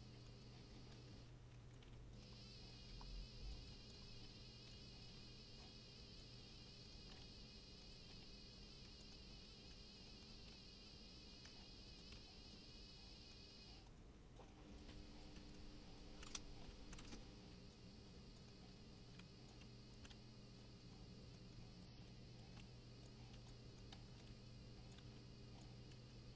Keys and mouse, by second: 0.2 middle click, 0.6 middle click, 0.8 right click, 1.6-5.7 typing, 1.6 click, 2.2 middle click, 2.4 middle click, 2.7 right click, 3.1 click, 3.6 right click, 3.9 click, 3.9 middle click, 4.7 click, 5.0 click, 5.5 shift+click, 6.2 click, 6.7 middle click, 6.9 middle click, 7.2 Tab, 7.6 Tab, 7.9 right click, 8.1-12.1 typing, 8.1 click, 8.5 right click, 8.6 middle click, 9.0 click, 9.1 middle click, 9.6 click, 9.9 click, 10.0 middle click, 11.3 shift+click, 12.0 click, 12.5 shift+click, 12.7 middle click, 13.2 middle click, 13.5 middle click, 13.6 right click, 13.8-20.5 typing, 13.9 click, 14.4 middle click, 14.7 middle click, 14.8 right click, 15.0 click, 15.2 right click, 15.4 click, 15.5 middle click, 16.0 click, 17.0 KP_Subtract, 17.1 Return, 17.7 click, 18.1 click, 18.3 click, 18.4 middle click, 18.9 click, 19.5 shift+click, 19.9 click, 20.5 shift+click, 20.8 middle click, 21.5 middle click, 21.8 right click, 22.0-26.3 typing, 22.1 click, 22.4 right click, 23.0 click, 23.2 middle click, 23.5 click, 24.2 click, 24.9 click, 25.6 shift+click.